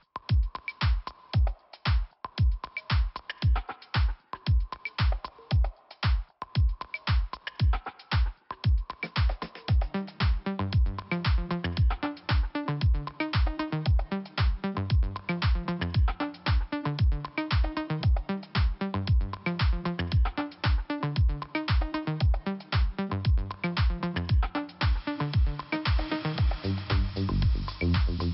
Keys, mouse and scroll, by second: 0.0 click, 0.1 click, 1.6 click, 4.6 click, 4.6 click, 5.5 click, 8.3 click, 8.8 click, 9.7 click, 9.7 click, 11.6 click, 13.1 scroll up 1, 14.1 click, 14.4 click, 14.8 click, 16.2 click, 16.3 click, 17.8 click, 21.2 click, 22.1 scroll down 2, 24.4 click, 24.5 click, 25.9 click, 27.3 click.